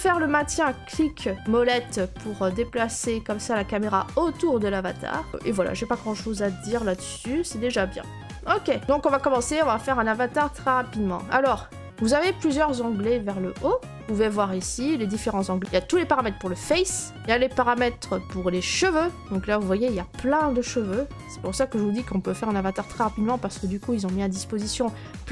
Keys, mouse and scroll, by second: 4.7-5.3 scroll, 5.3 right click, 5.3 click, 5.3-6.6 scroll, 7.1-8.3 scroll, 8.8 middle click, 9.0 middle click, 9.5 right click, 10.0 middle click, 17.2 click, 19.5 middle click, 19.5 middle click, 19.9-20.8 scroll.